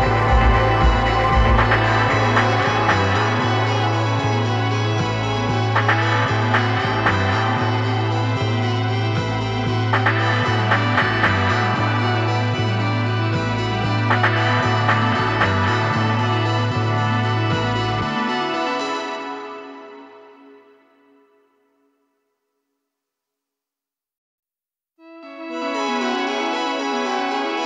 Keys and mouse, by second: 0.4-2.3 right drag, 4.6-6.2 right drag, 9.5-10.8 drag, 10.8-12.3 middle drag, 12.6-13.6 middle drag, 14.8 middle click, 17.3 middle click, 23.0-24.9 drag.